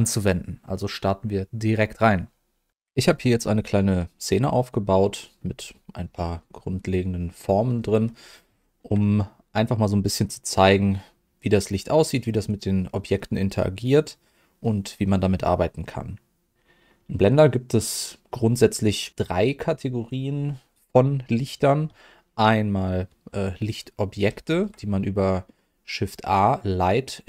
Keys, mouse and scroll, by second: 5.1 middle click, 6.0-6.4 scroll up 2, 6.3 middle click, 7.4 scroll down 1, 7.7 middle click, 8.2 scroll down 1, 8.6 shift+middle click, 9.0 middle click, 10.4 middle click, 13.1-17.3 middle drag, 24.2 shift+a.